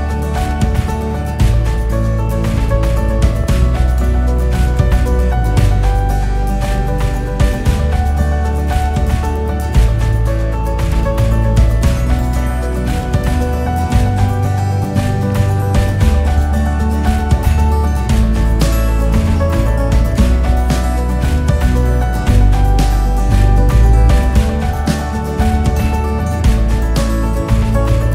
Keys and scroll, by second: 8.8 ctrl+alt+2.